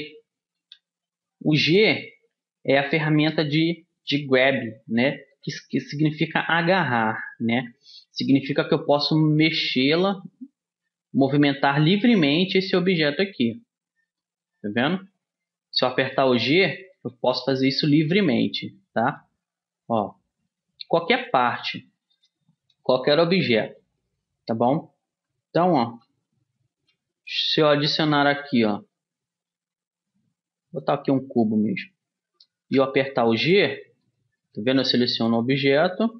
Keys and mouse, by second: 0.7 g, 8.1 g, 14.9 g, 17.1 g, 19.2 g, 20.7 g, 25.3 a, 26.9 shift+a, 32.8 g, 34.2-35.9 drag, 34.6 g.